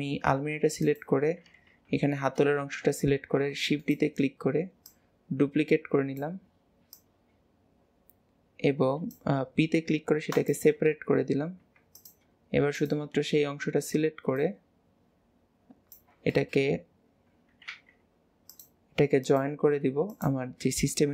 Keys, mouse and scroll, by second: 0.9 click, 2.0 l, 3.2 shift+d, 4.0-6.2 right drag, 7.0 click, 11.7 Tab, 12.1 click, 12.8 click, 14.5 click, 17.8 ctrl+z, 18.6 click, 19.3 click, 20.2 shift+click.